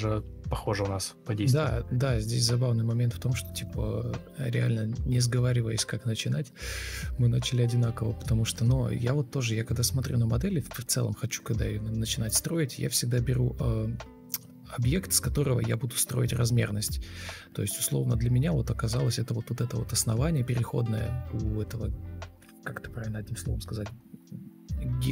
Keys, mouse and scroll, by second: 0.4 ctrl+x, 0.7 Delete, 0.8 ctrl+v, 2.0 Delete, 2.3 ctrl+c, 3.2 Escape, 3.6 Delete, 4.0 ctrl+v, 4.7 Escape, 4.9 Delete, 5.8 ctrl+space, 14.6 ctrl+space, 16.3 ctrl+space, 16.5 ctrl+space, 17.6 ctrl+space, 18.9 shift+click, 21.9 shift+t, 22.3-22.7 ctrl+scroll down 1, 23.0 ctrl+scroll up 1, 23.3 ctrl+space, 24.2 ctrl+space, 24.3 Escape, 24.5 ctrl+r.